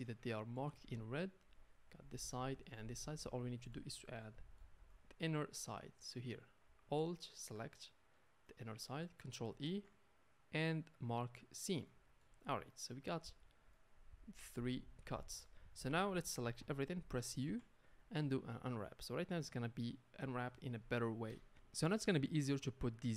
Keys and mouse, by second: 0.0 Tab, 0.6 a, 0.8 a, 5.8-7.1 middle drag, 7.1 alt+click, 7.2-12.0 alt+middle drag, 9.6 ctrl+e, 12.3 a, 12.4 a, 12.5-15.4 middle drag, 16.6 a, 17.4 u, 18.7-22.0 middle drag, 22.6 middle click.